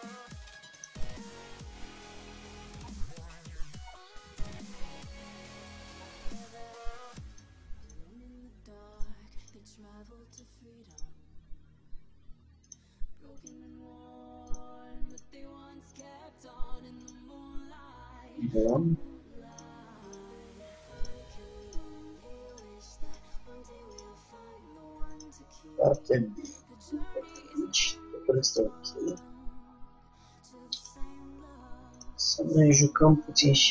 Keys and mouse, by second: 1.1 g, 1.8 click, 8.0-13.0 drag, 8.4 g, 9.8 g, 12.7 g, 13.6-17.9 drag, 13.8 g, 16.4 g, 18.8-25.0 drag, 18.9 g, 20.4 g, 21.9 g, 23.4 g, 25.3-27.7 drag, 25.4 g, 26.7 g, 28.8-30.3 drag, 29.8 g, 30.3 middle click, 31.0-33.7 drag, 32.5 g.